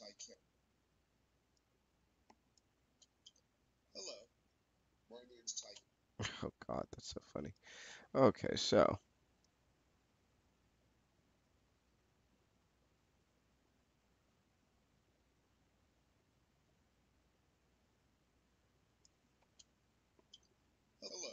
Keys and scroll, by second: 2.6 space, 5.4 space, 19.2 space.